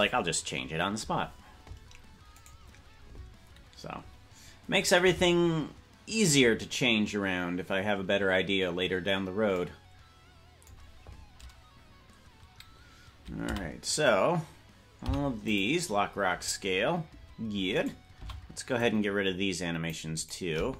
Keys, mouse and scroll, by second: 2.5 right click, 13.5 a, 17.7 right click, 17.7 i, 18.1 c.